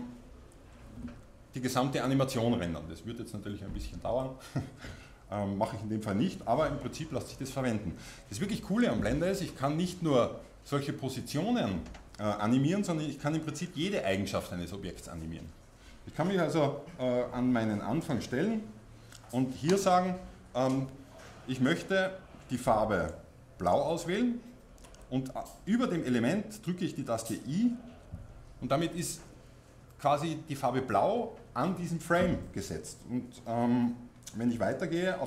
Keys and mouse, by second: 18.1-27.5 drag, 27.5-32.1 middle drag, 34.8-35.2 drag.